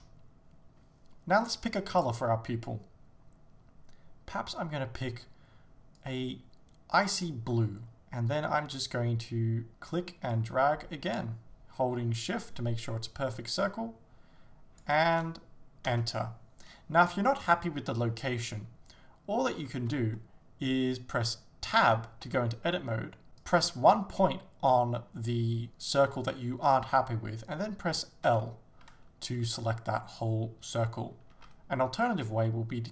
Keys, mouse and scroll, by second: 0.0 Return, 10.4 click, 16.0 Return, 22.3 Tab, 23.4 right click, 28.3 l, 31.4 a.